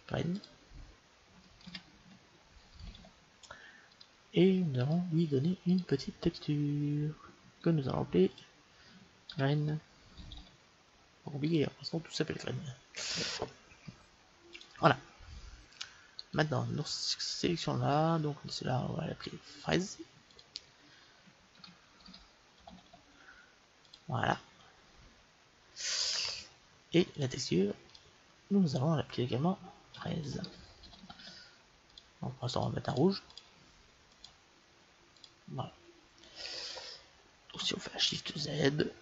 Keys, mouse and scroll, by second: 4.8-7.7 drag, 8.3-10.2 drag, 14.5-16.3 drag, 16.3 middle click, 16.3-18.1 right drag, 18.1 middle click, 19.6-22.0 drag, 27.1-30.5 drag, 32.4-35.1 drag, 36.1-38.5 middle drag, 38.5 shift+z.